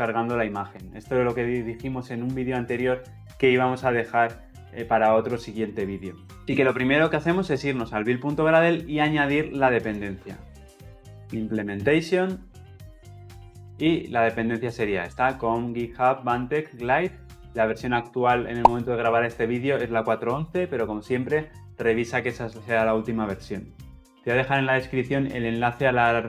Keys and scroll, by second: 13.6 ctrl+v.